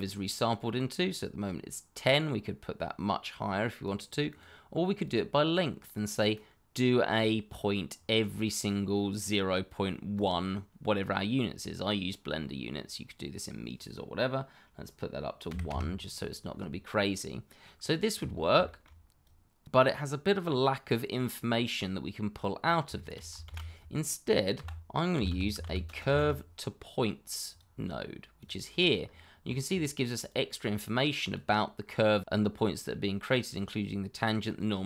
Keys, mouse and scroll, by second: 1.9 click, 6.5 click, 10.1 click, 15.4 1, 15.7 Return, 17.6-18.1 scroll down 1, 18.6 shift+middle click, 18.7 middle click, 19.2 click, 20.3-20.9 scroll up 1, 22.5-22.8 scroll down 1, 22.9 shift+middle click, 23.4 shift+a, 24.5-26.0 typing, 27.4 click, 29.3 scroll, 29.4 shift+middle click, 30.2 click.